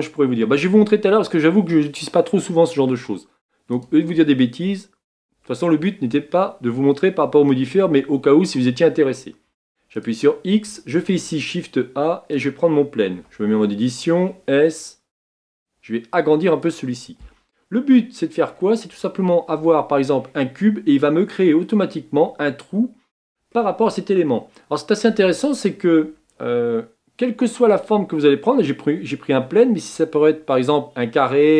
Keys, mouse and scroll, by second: 3.7-6.5 drag, 6.5-9.3 middle drag, 9.5 x, 11.0 shift+a, 17.6-18.9 middle drag, 18.9 Tab, 23.6-28.0 middle drag.